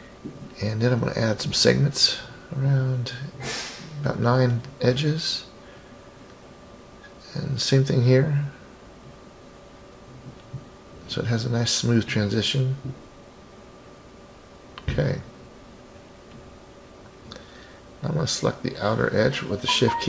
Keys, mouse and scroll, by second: 0.0 click, 0.2 click, 0.4 click, 2.5 click, 3.1 click, 3.6 click, 4.6 click, 6.0 shift+click, 7.0-8.5 drag, 9.7 click, 10.0 click, 10.2 click, 10.3 click, 10.5 click, 10.7 click, 10.9 click, 11.1 click, 11.4 click, 12.3 click, 12.7-13.2 scroll down 2, 13.2-15.8 middle drag, 16.9 click, 17.2 click, 18.2 scroll up 4.